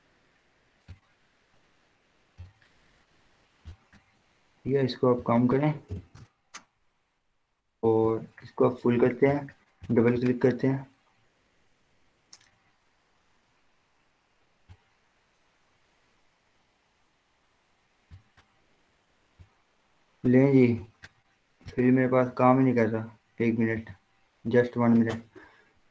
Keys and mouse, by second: 6.0 0, 6.2 Return, 8.3 click, 15.3-25.9 drag.